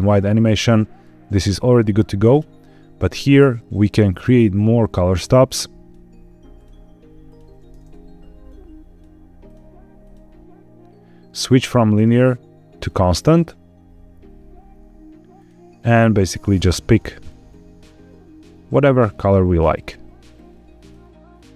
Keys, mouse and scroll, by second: 0.1-0.9 scroll up 1, 0.9-2.2 scroll up 1, 2.2 click, 3.9 click, 5.1-5.8 drag, 6.4 click, 7.1 click, 8.3 click, 9.3 click, 9.9 click, 11.4-12.8 drag, 15.2 click, 15.8 click, 21.4 click.